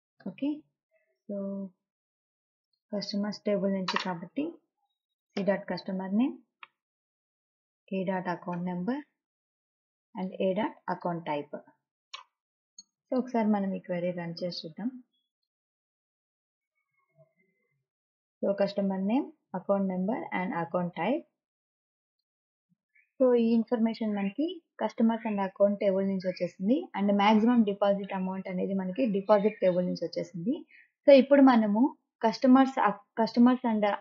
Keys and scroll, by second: 0.7 ;, 5.8 c, 7.1 ., 9.0 a, 9.7 ., 12.2 a, 12.9 ..